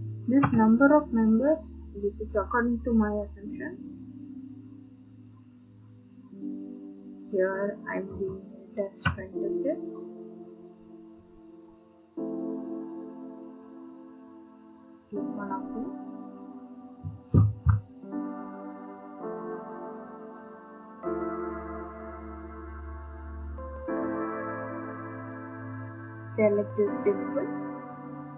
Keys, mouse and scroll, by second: 0.4 BackSpace, 8.1-9.0 typing, 12.3 click, 15.1 click, 16.6 click, 20.4 click, 23.0-23.5 scroll, 25.2 click.